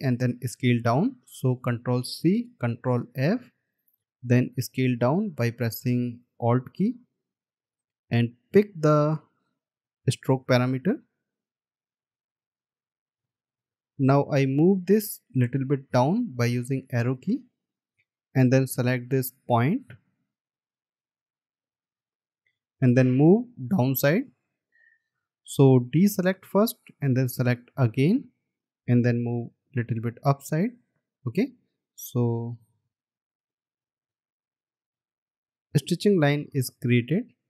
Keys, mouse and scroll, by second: 2.2 ctrl+c, 3.3 ctrl+f, 5.2 alt+click, 9.2 scroll down 1, 13.6-14.0 alt+scroll up 1, 18.0 Down, 19.5-19.9 alt+scroll up 1, 24.7 Down, 29.8 Up, 31.9-32.2 alt+scroll down 1, 33.1 alt+scroll up 1.